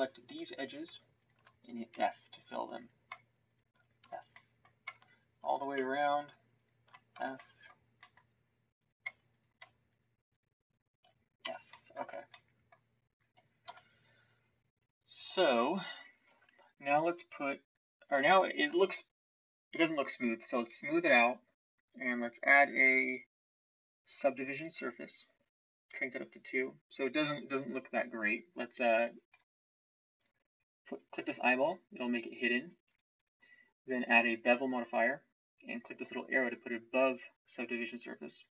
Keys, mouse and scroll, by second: 1.9 f, 4.0 f, 4.5 middle click, 7.1 f, 11.4 f, 12.0 Tab, 13.6 KP_1, 14.7 Tab, 16.2 Tab.